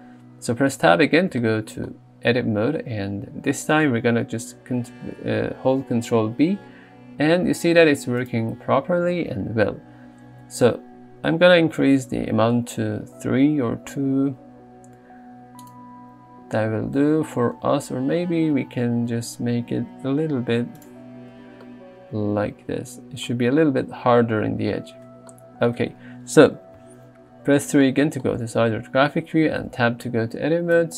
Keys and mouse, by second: 0.8 Tab, 6.0 ctrl+b, 9.5 ctrl+b, 17.8 ctrl+z, 18.6 ctrl+b, 21.0 Tab, 26.8 KP_3, 28.1 shift+middle click, 29.6 Tab.